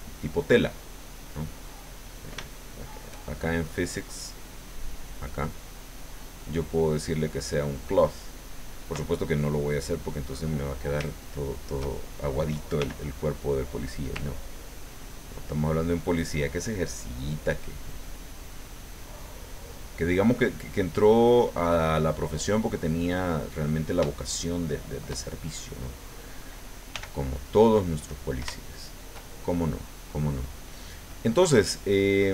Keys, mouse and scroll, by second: 1.3-2.4 middle drag, 2.5 shift+middle click, 4.3 middle click, 5.6 click, 7.8 click, 9.9 click, 11.1 shift+click, 12.8 f, 13.6 click, 14.7-16.9 ctrl+drag, 17.6-19.8 ctrl+drag, 20.5-21.8 ctrl+drag, 21.9 ctrl+click, 22.7 middle click, 24.6-25.7 shift+middle drag, 26.9 f, 27.9 click, 28.6 shift+middle click, 29.5 shift+middle click.